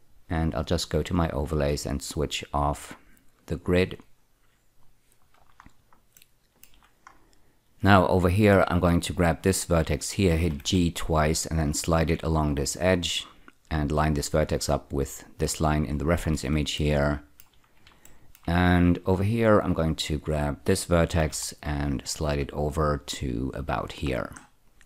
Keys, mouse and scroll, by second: 0.8 click, 3.7 click, 5.2 scroll down 4, 6.1 shift+middle click, 7.1 scroll up 2, 8.3 click, 10.4 g, 10.6 g, 13.3 click, 16.1-16.4 scroll down 2, 16.7 shift+middle click, 18.0 shift+middle click, 18.1 shift+middle click, 18.8-20.1 scroll up 2, 20.1 click, 21.1 g, 21.3 g, 23.7 click, 24.1 scroll down 4, 24.6 click.